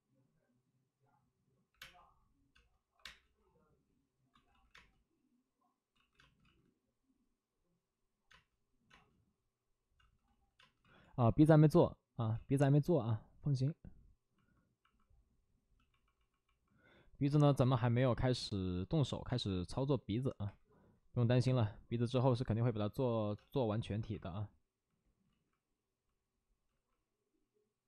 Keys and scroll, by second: 0.5 space, 1.6 3, 1.7 space, 2.9 1, 4.3 ctrl+z, 4.7 ctrl+z, 4.7 space, 5.9 ctrl+z, 6.1 space, 6.4 ctrl+z, 8.2 space, 10.2 ctrl+z, 10.5 space, 10.8 ctrl+z, 15.7 ctrl+z, 19.2 space, 20.4 3, 23.3 space, 23.9 1, 25.2 ctrl+z, 26.6 ctrl+z.